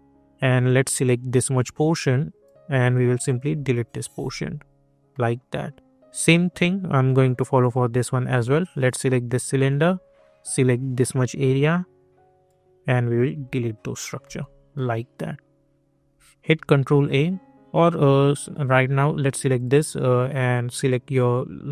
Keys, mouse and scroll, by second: 0.6-4.7 drag, 5.1 middle click, 7.6 click, 9.2 alt+middle click, 10.5-14.2 drag, 14.2 middle click, 16.5 ctrl+a, 17.0 scroll up 1, 18.0-19.5 alt+drag.